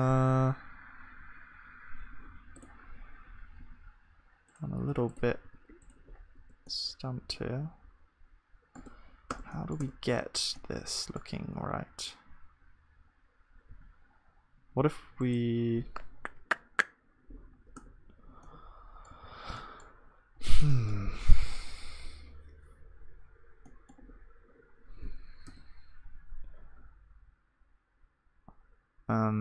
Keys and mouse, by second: 5.5-8.8 drag, 5.5 g, 6.4 Tab, 8.9 Tab, 9.3 Tab, 9.8 Tab, 9.8-13.3 middle drag, 17.8 Tab, 17.8-29.4 middle drag, 19.2 ctrl+s, 25.5 Tab.